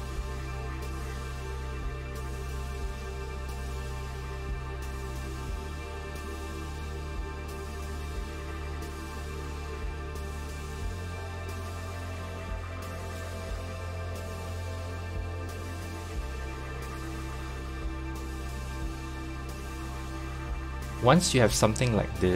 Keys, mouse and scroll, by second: 5.0 click, 6.0 3, 7.9 KP_1, 9.6 KP_3, 9.6 g, 12.7-13.8 shift+middle drag, 13.8 1, 14.4 click, 17.9 click, 18.8 s, 21.2 scroll up 2, 22.1 shift+middle click.